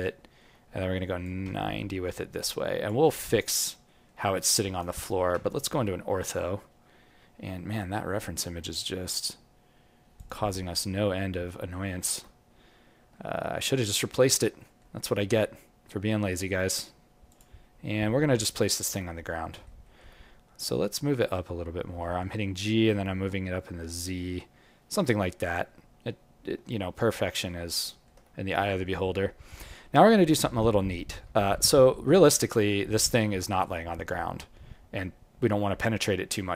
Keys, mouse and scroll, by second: 0.0 alt+middle click, 1.2 click, 3.2 alt+click, 3.8 alt+middle click, 4.3 alt+right click, 5.0 alt+middle click, 5.4 ctrl+middle click, 5.9 ctrl+middle click, 6.8 scroll down 1, 7.5 scroll down 9, 10.1 click, 10.7-11.7 scroll up 7, 11.7 alt+middle click, 12.3-12.9 scroll up 2, 13.1 alt+middle click, 13.9 scroll down 1, 14.5 scroll down 1, 14.5 g, 17.6-18.4 scroll up 6, 18.4 scroll down 3, 18.6 alt+middle click, 19.4 alt+middle click, 19.8 alt+middle click, 20.2-20.6 scroll up 1, 21.9-22.7 scroll up 2, 21.9 g, 25.7-26.8 scroll down 9, 26.8 alt+middle click, 28.4-29.2 scroll up 2, 29.2 scroll down 1, 29.3-30.4 scroll down 2, 30.4 scroll down 2, 30.6 alt+middle click.